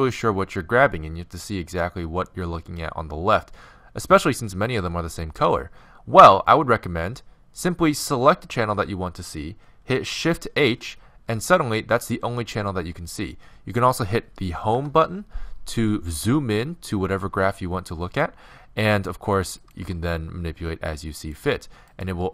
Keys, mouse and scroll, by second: 4.4 a, 8.0-10.6 drag, 10.6 shift+h, 12.1 a, 14.8 Home, 18.2-19.6 middle drag, 19.6-21.5 right drag, 19.8 g, 21.9-22.3 right drag, 22.1 g.